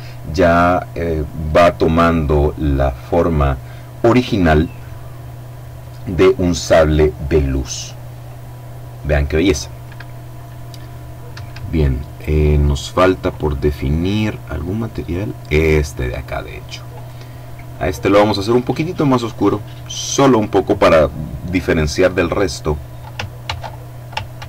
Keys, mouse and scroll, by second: 10.5 Escape, 11.7-12.8 drag, 13.2-14.4 right drag, 16.2 click, 17.2 click, 18.5 click, 19.2 click, 22.7 ctrl+c, 23.5 ctrl+v.